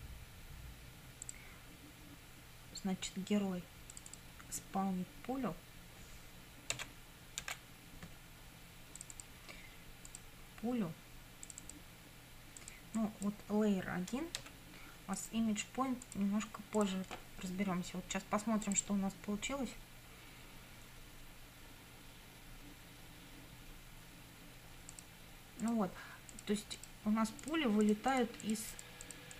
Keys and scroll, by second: 6.8 s, 7.5 p, 14.4 1.